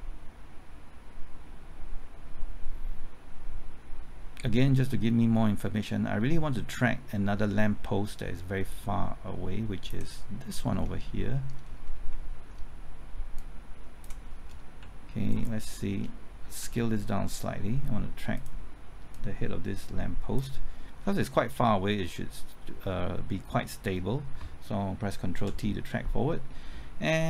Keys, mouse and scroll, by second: 10.5-11.1 scroll up 1, 11.1 middle click, 11.6-12.1 scroll up 1, 12.1-13.3 middle drag, 14.8 typing, 15.3 ctrl+click, 16.6 s, 18.3-21.0 drag, 21.0-24.3 scroll down 1, 24.3 typing, 25.6 ctrl+t.